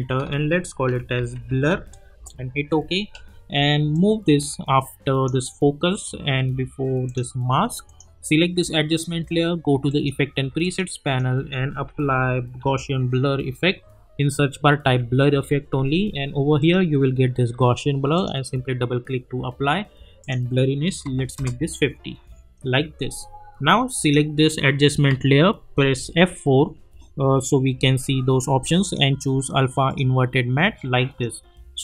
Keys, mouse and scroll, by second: 0.6-2.2 typing, 3.9-5.5 drag, 11.6-13.1 typing, 14.8 typing, 16.6 click, 21.3 Return, 24.0 click, 26.2 F4, 28.8 click.